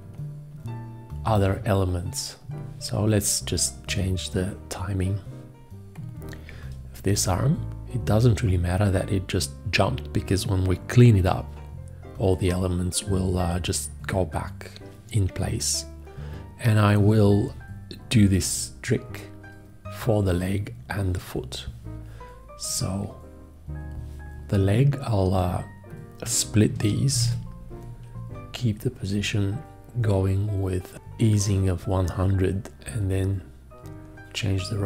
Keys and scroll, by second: 27.1 ctrl+v.